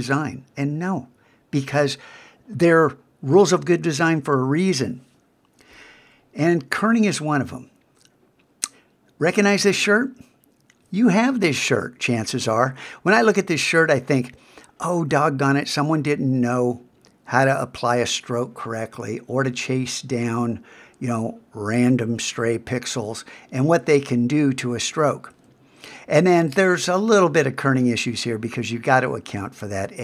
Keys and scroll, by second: 6.9 super+Tab.